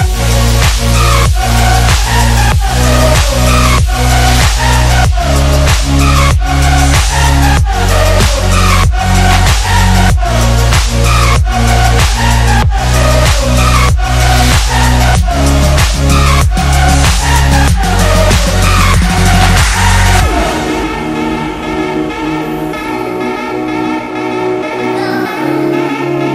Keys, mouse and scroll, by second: 6.8 Down, 8.7 click, 9.3 space, 11.6 click, 16.4 click, 20.2 space, 20.3-20.8 click, 20.6 space, 20.8-24.7 drag.